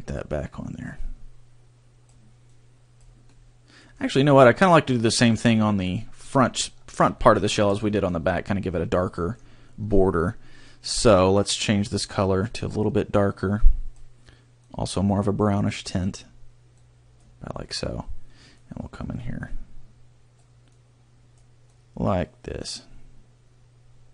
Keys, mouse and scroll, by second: 2.4 click, 3.3 middle click, 7.1 shift+middle click, 7.5 middle click, 11.4 click, 18.7 click.